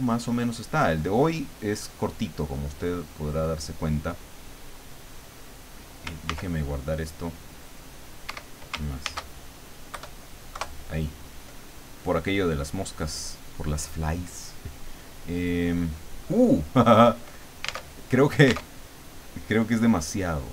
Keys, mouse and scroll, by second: 6.2 ctrl+s, 8.2 Escape, 9.0 ctrl+shift+s, 9.9 KP_Add, 10.6 KP_Enter, 11.7 click, 12.6 click, 13.4 click, 17.7 alt+Tab, 18.6 alt+Tab.